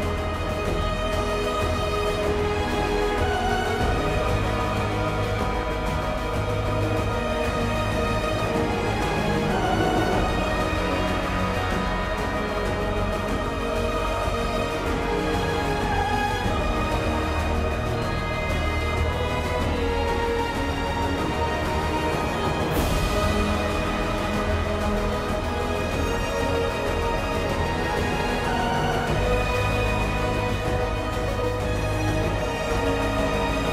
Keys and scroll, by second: 1.6 ctrl+u, 15.4 ctrl+u, 21.7 ctrl+z.